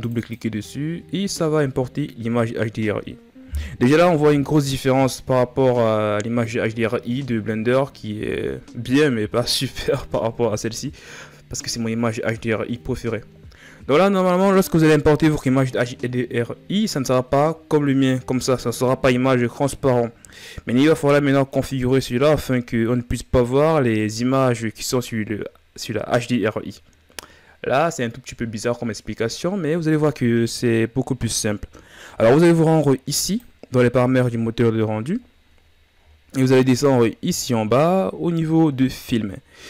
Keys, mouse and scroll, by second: 3.9 KP_1, 32.9-35.2 drag, 35.2-36.5 scroll down 11, 36.5 scroll down 2, 39.1-39.6 scroll down 10.